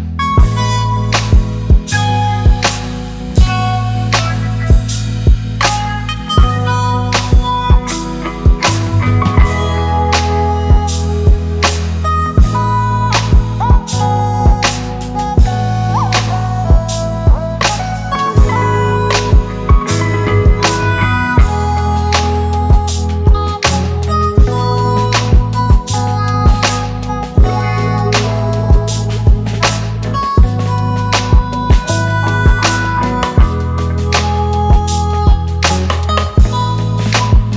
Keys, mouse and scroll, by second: 7.4 right click, 9.7 double click, 13.4 right click, 16.2 double click, 36.2 ctrl+click.